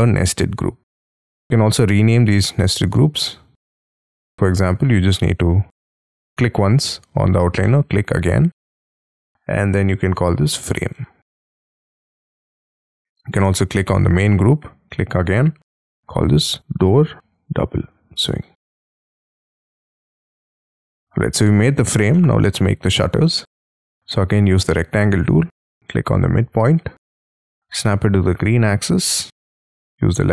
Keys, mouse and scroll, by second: 1.5 right click, 2.8 double click, 4.1 Escape, 5.2 double click, 10.2-13.0 typing, 15.3-19.4 typing, 22.1 middle click, 22.9 scroll up 4, 23.1 r, 23.6-24.1 scroll up 5, 24.1 middle click, 26.0-26.9 scroll down 9, 26.9 right click, 27.3 click.